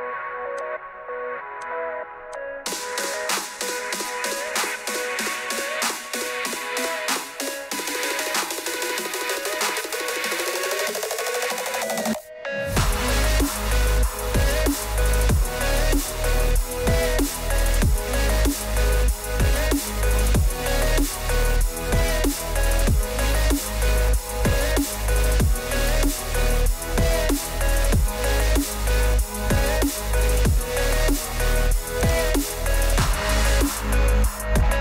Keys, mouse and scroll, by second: 0.6 shift+click, 1.6 shift+click, 2.3 shift+click, 2.6 Delete, 2.6 click, 4.0 click, 5.5 shift+click, 6.0 shift+click, 6.4 shift+click, 7.1 shift+click, 7.4 shift+click, 9.0 Delete, 9.8 click, 11.2 click, 12.1 shift+click, 12.8 shift+click, 13.4 shift+click, 14.5 click, 16.3 click, 17.1 shift+click, 17.5 shift+click, 18.2 shift+click, 19.2 shift+click, 19.7 Delete, 20.3 click, 21.7 click, 23.2 click, 23.7 click, 25.0 shift+click, 26.5 click, 29.1 click, 29.5-30.5 scroll down 7, 30.5 click, 30.9 click, 32.8 click, 34.2 click.